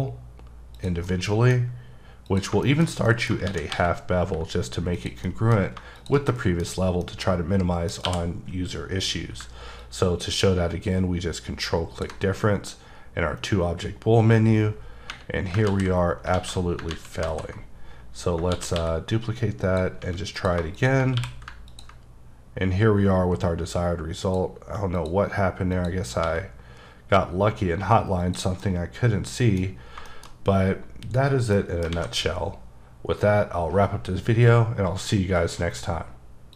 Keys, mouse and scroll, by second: 0.8 click, 1.1 middle click, 2.3 click, 2.6 shift+middle click, 2.9 scroll down 1, 3.1 middle click, 3.4 shift+d, 3.7 x, 4.9 click, 5.3 middle click, 6.0 shift+click, 6.3 middle click, 6.7 scroll up 2, 7.0 middle click, 8.1 q, 9.8 ctrl+click, 13.3-13.7 scroll down 2, 15.7 z, 16.2 alt+z, 16.3 alt+a, 16.9 ctrl+z, 17.2 ctrl+z, 18.3 scroll down 2, 18.5 shift+d, 18.8 x, 19.7 click, 20.0 s, 20.4 click, 20.8 double click, 21.2 q, 21.7 ctrl+click, 25.0 click, 25.7 click, 26.2 s, 28.2 click, 28.6 middle click, 29.8 scroll down 2, 30.1 shift+middle click, 31.9 alt+a.